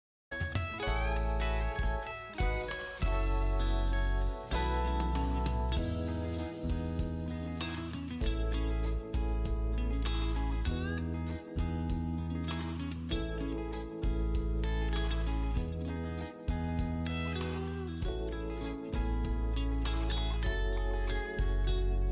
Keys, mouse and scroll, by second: 5.8 space, 10.8-11.8 scroll up 1, 11.8 click, 20.5 space, 20.8-21.6 scroll down 1, 21.6 click, 22.0 z.